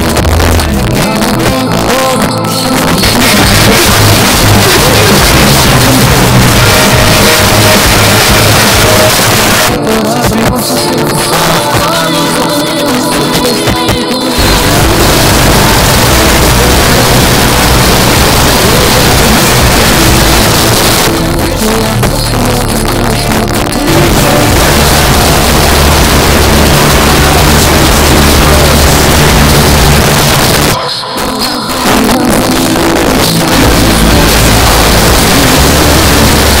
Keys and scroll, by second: 9.1 Page_Down, 20.4 Page_Down, 30.0 Page_Down.